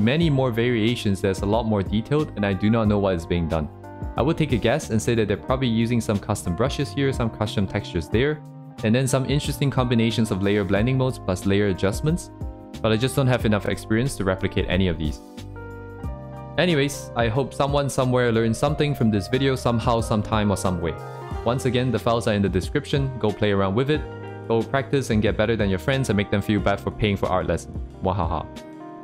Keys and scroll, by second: 2.0 ctrl+z, 5.1 ctrl+z, 8.5 ctrl+z, 12.6 ctrl+z, 15.1 ctrl+z, 18.8 ctrl+z, 22.2 ctrl+z, 22.5 ctrl+z, 23.3 ctrl+z, 23.7 ctrl+z, 24.4 ctrl+z, 25.0 ctrl+z, 26.0 ctrl+z, 26.4 ctrl+z, 26.9 ctrl+z, 28.5 ctrl+z.